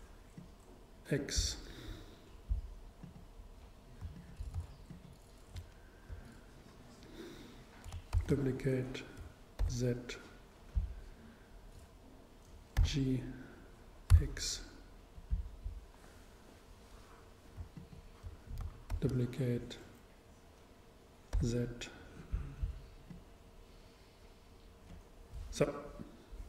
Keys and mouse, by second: 0.5-2.0 drag, 4.1 super+click, 4.2 super+middle click, 4.9-6.9 super+right drag, 8.2 shift+d, 10.9-12.8 drag, 12.8 g, 15.5-17.2 drag, 17.8-19.6 super+right drag, 19.0 shift+super+d, 22.5-24.9 drag.